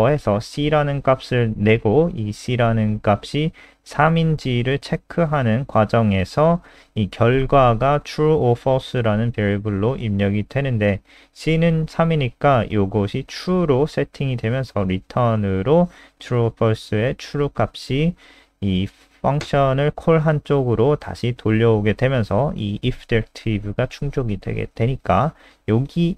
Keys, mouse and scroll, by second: 12.3 click, 13.6 click, 18.1 click, 20.1 click.